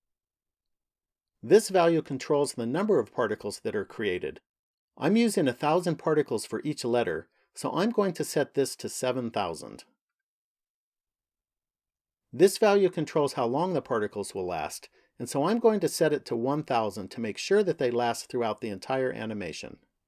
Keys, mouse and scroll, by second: 8.2 click, 10.0 KP_0, 15.2 click, 17.5 KP_0.